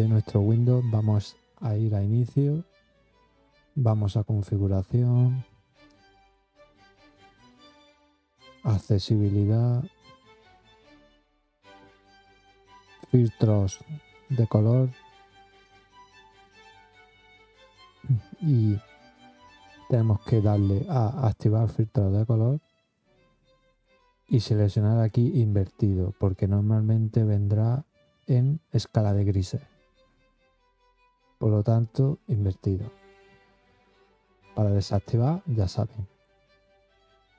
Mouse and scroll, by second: 2.2 click, 5.9 click, 9.2 click, 14.1 click, 16.1 middle click, 16.2 middle click, 17.7 middle click, 21.2 click, 23.7 click, 24.9 click, 26.3 click, 32.1 click, 35.0-36.2 drag.